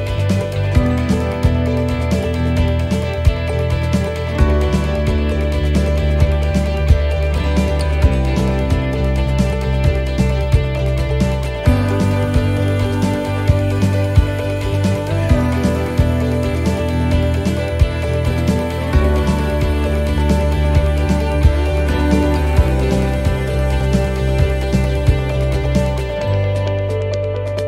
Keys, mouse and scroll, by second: 0.0 shift+middle click, 1.0 alt+shift+right click, 1.5 middle click, 3.0 scroll down 2, 3.3 middle click, 3.7 scroll down 1, 4.5 middle click, 4.5 scroll down 1, 6.1 click, 6.9 middle click, 8.0-8.5 scroll down 3, 8.4 middle click, 10.5 click, 11.6 click, 17.8 scroll down 1, 19.3 click, 19.3 scroll down 1, 20.7 middle click, 21.3-21.9 scroll up 5, 21.8 middle click, 22.6-22.9 scroll up 2, 23.0 shift+middle click, 24.3 middle click, 24.3-24.8 scroll down 5, 25.2 shift+middle click, 25.9-26.8 scroll down 2, 26.8 right click.